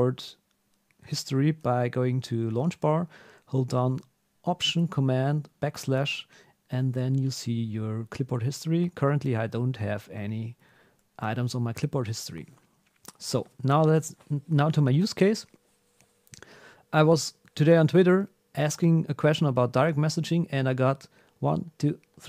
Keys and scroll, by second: 5.5 alt+super+\, 11.1 super+h.